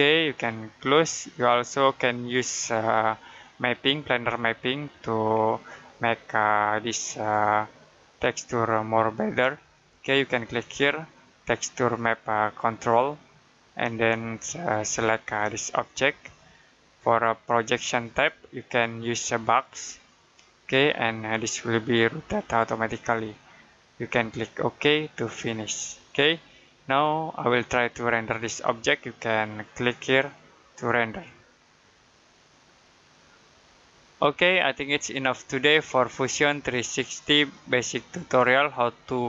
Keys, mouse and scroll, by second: 5.3 middle click, 8.9 middle click, 12.7 click, 15.5 click, 25.0 click, 25.8 middle click, 29.5 click.